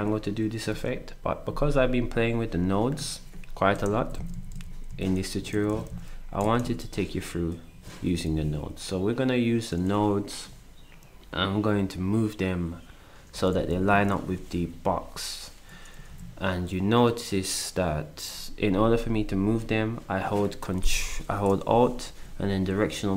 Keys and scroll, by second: 0.0 Up, 0.0 Right, 4.0 alt+Left, 4.5 Left, 4.9 Left, 5.3 Down, 5.5 Down, 5.8 Down, 6.6 Down, 8.0 Up, 13.3 alt+Down, 13.9 Down, 14.3 Down.